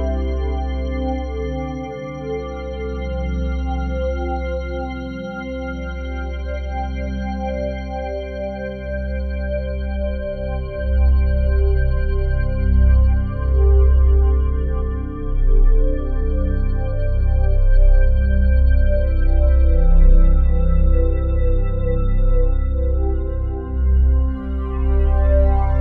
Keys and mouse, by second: 0.4-2.0 typing, 2.2 Return, 3.2 click, 4.4 click, 4.7-6.5 typing, 5.4 ctrl+click, 6.7 click, 7.6 typing, 10.7 click, 11.3 click, 12.0-13.0 drag, 13.2 click, 14.0 click, 14.6 Delete, 15.4 click, 17.0 ctrl+s, 18.1-18.8 drag, 19.0-20.0 shift+drag, 20.2 ctrl+l, 21.6 Down, 21.8 Down, 22.5 Return, 24.0-25.8 drag.